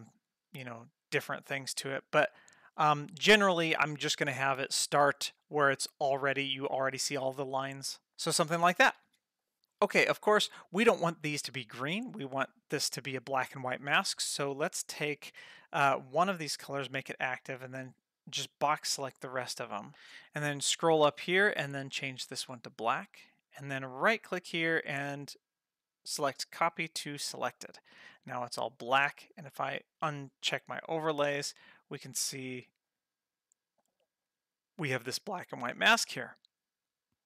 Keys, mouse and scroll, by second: 4.6 space, 8.1 space, 9.0 space, 14.4 ctrl+middle click, 15.0 middle click, 16.0 click, 17.6-19.0 drag, 20.3-22.2 scroll up 11, 22.2 click, 22.2-22.7 scroll up 1, 24.1-26.7 right drag, 29.9 click, 32.0 space.